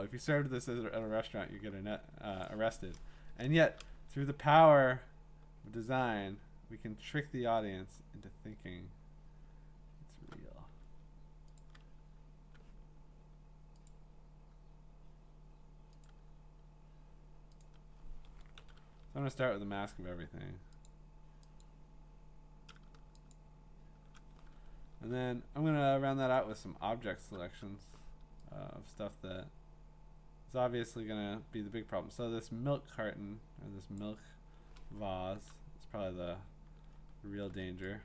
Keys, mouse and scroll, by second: 0.7 click, 2.4 click, 3.3 Return, 4.2-5.9 alt+scroll, 6.6-8.1 scroll, 8.4 scroll down 11, 8.4-9.0 scroll down 4, 9.1-9.5 scroll up 4, 9.5-10.3 scroll, 11.6 ctrl+click, 13.9 click, 15.8 click, 16.1 click, 17.6 click, 18.6 ctrl+i, 20.9 click, 21.6 click, 23.3 shift+click, 23.5 shift+click, 24.6 scroll, 26.4 click, 26.9 scroll, 28.1 middle click, 34.0 click, 35.4 click, 36.7 click, 36.7 middle click, 36.8 middle click, 36.9 middle click, 37.1 middle click, 37.2 scroll.